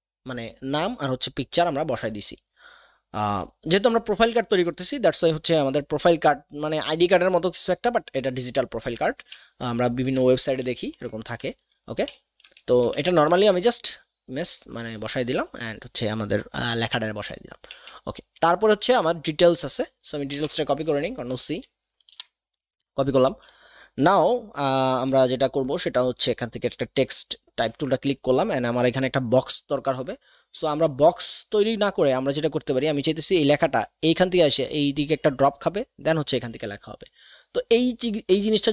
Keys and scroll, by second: 17.7 alt+Tab, 20.3 shift+End, 21.3 c, 21.4 c, 22.0 ctrl+shift+Left, 22.6 ctrl+alt+shift+Tab.